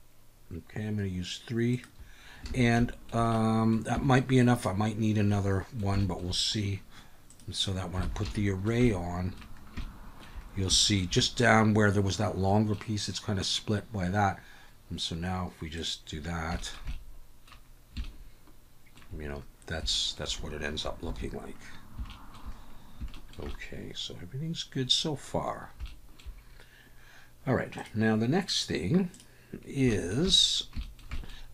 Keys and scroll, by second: 2.5 alt+a, 4.0 Tab, 8.1 alt+a, 21.0 ctrl+s.